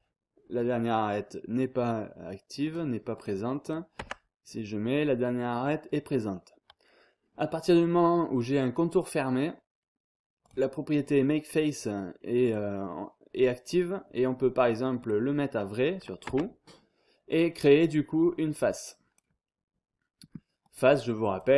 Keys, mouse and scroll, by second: 2.6-4.2 drag, 4.0 Tab, 10.4 click, 12.4 click, 15.0 click, 16.2 Tab, 18.2-19.6 drag, 20.6 click.